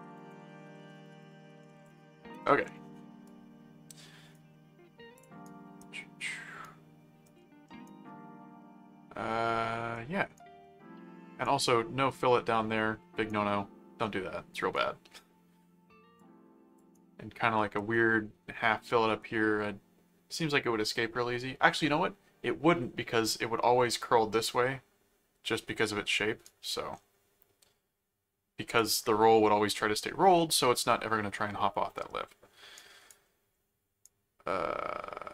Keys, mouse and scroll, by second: 0.0-2.3 typing, 3.2 right click, 5.2 click, 5.4 right click, 6.0 middle click, 6.6 right click, 7.4 middle click, 7.8-9.9 right drag, 10.4 right click, 13.3-14.7 right drag, 16.2 click, 16.9 right click, 26.4-28.7 right drag, 32.8 right click, 33.2 middle click, 34.0-35.3 right drag.